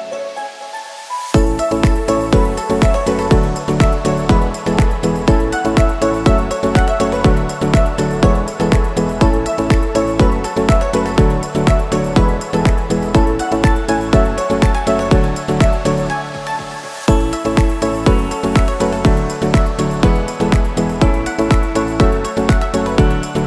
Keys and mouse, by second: 0.5 shift+click, 1.7-2.7 middle drag, 3.0 shift+middle drag, 3.7 shift+click, 5.3-6.5 shift+middle drag, 8.1-8.7 ctrl+drag, 8.9-9.8 shift+middle drag, 10.8 middle click, 11.5 shift+middle click, 12.0 shift+click, 12.5 ctrl+click, 13.3 shift+click, 14.1 shift+click, 14.9 ctrl+s, 15.1 q, 17.6 ctrl+s, 17.9 a, 18.0 a, 21.2 click.